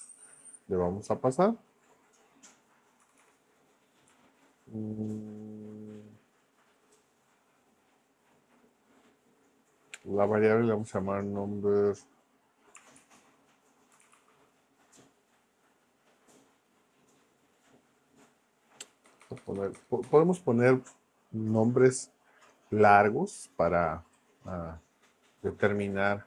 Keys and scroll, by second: 2.8-4.1 typing, 13.0-14.6 typing, 19.0 BackSpace, 20.0 BackSpace.